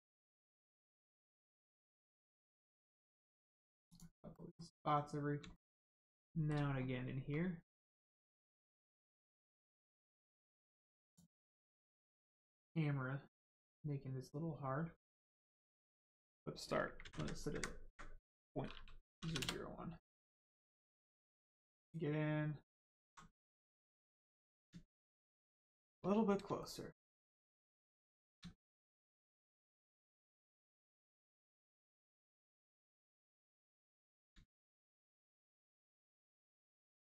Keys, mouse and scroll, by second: 0.7 scroll down 1, 1.2 middle click, 1.7 shift+middle click, 2.2 middle click, 2.9 shift+middle click, 3.2 scroll up 1, 3.9 click, 4.3 middle click, 4.7-5.3 scroll up 1, 5.5 shift+middle click, 6.7 scroll down 1, 11.0 click, 16.1 click, 17.1 Left, 17.5 Right, 19.1 0, 19.3 Return, 20.8 shift+middle click, 21.5 alt+middle click, 21.9 alt+right click, 23.1 ctrl+right click, 24.9 shift+middle click, 26.1 ctrl+middle click, 28.3 ctrl+shift+middle click, 28.3 shift+middle click, 28.5 shift+middle click, 29.3 shift+right click, 31.5 middle click, 32.1 scroll up 1, 32.6 shift+middle click, 33.2 scroll up 1, 33.7 middle click, 34.4 shift+middle click, 36.0 middle click.